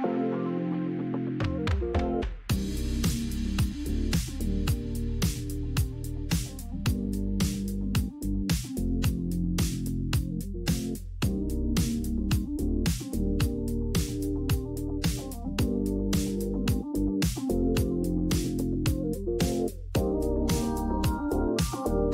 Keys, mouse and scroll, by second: 0.0 click, 0.4 click, 1.5 click, 2.1 click, 2.3-3.3 typing, 5.2 click, 7.2 ctrl+click, 8.5 click, 10.2 alt+click, 11.5 click, 13.1 click, 14.6 click, 16.9 click, 18.0 ctrl+t, 19.9 click, 20.7 click, 20.9 click.